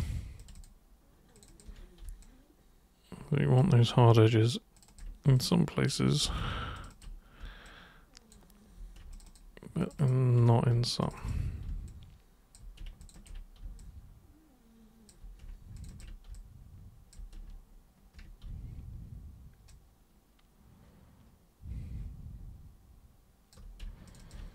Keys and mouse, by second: 0.3 ctrl+shift+super+click, 1.3 ctrl+shift+super+click, 1.5 ctrl+shift+super+click, 2.2-3.6 alt+super+drag, 4.7 ctrl+shift+super+click, 4.9 ctrl+shift+super+click, 5.3 alt+super+click, 6.8 ctrl+shift+super+click, 6.9 ctrl+shift+super+click, 7.6 alt+super+click, 9.1 ctrl+shift+super+click, 9.8 ctrl+shift+super+click, 10.0 ctrl+shift+super+click, 11.0 ctrl+shift+super+click, 11.1 ctrl+shift+super+click, 11.9 alt+super+click, 13.0 ctrl+shift+super+click, 13.8-15.0 alt+super+drag, 15.7 ctrl+shift+super+click, 16.3 alt+super+click, 19.7-23.5 alt+super+drag, 24.0 ctrl+shift+super+click.